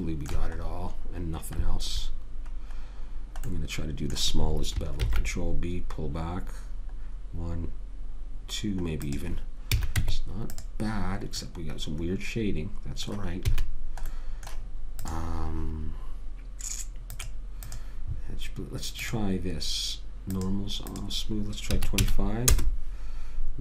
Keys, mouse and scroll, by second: 5.3 ctrl+b, 10.1 a, 10.3 Tab, 11.8-12.8 middle drag, 13.8 a, 15.3 click, 17.4-22.8 drag.